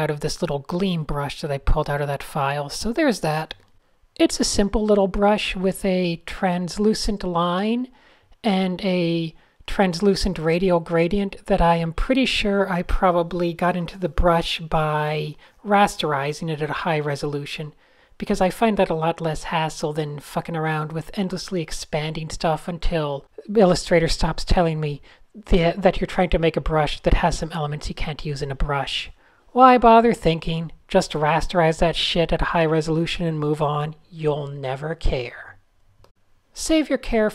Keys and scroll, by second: 0.8 n, 1.4 super+z, 2.0 super+z, 2.9 super+0, 3.0 Tab, 3.8 super+space, 4.0 super+z, 4.1 super+z, 4.2 super+z, 4.9 super+0, 5.5 super+space, 5.9 Tab, 6.6 n, 6.8 super+space, 8.9 super+z, 9.5 super+z, 14.7 a, 15.3 n, 15.5 super+z, 15.6 super+d, 17.3 super+-, 17.6 super+0, 26.4 Tab, 26.9-32.0 typing, 27.3 Down, 27.4 Return, 28.8 alt+BackSpace, 28.8 alt+BackSpace.